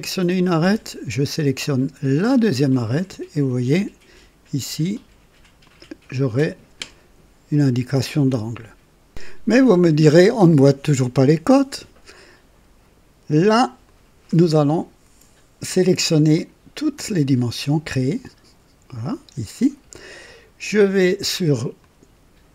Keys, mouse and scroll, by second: 2.2 click, 5.6 click, 9.0 click, 13.8 click, 16.3 click, 17.8 shift+click, 21.7 click.